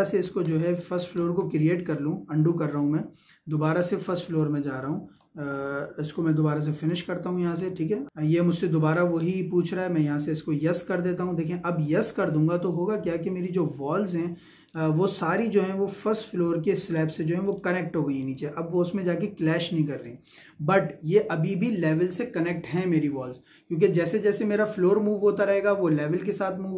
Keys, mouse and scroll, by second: 4.0-6.9 drag, 10.4 click, 14.7 shift+middle click, 17.0 shift+middle click, 18.2 click, 19.1-22.6 shift+middle drag.